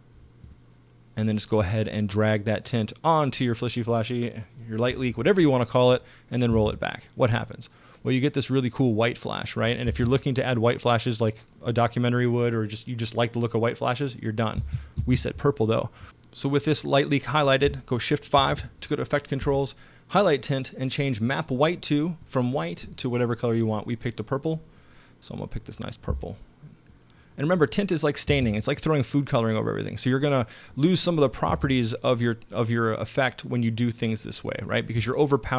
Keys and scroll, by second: 0.0-0.1 typing, 6.5 space, 9.9 space, 14.6 space, 18.4 shift+5, 28.3 space, 31.5 space.